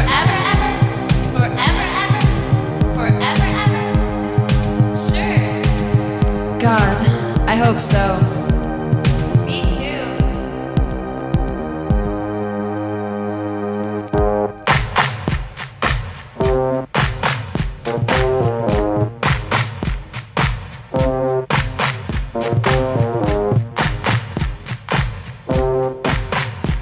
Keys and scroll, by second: 3.2 space, 5.4 ctrl+z, 6.6 space, 9.3 space, 9.9 ctrl+z, 10.3 ctrl+z, 10.9 ctrl+z, 14.3 space.